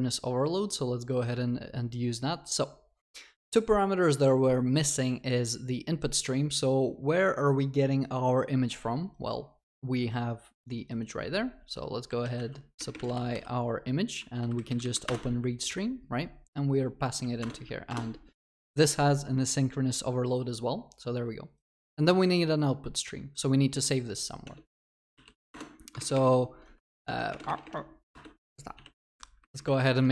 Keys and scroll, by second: 15.1 Return, 17.4 alt+Return, 25.5 Return, 26.6 ctrl+BackSpace, 26.7 Tab, 27.4 ctrl+BackSpace.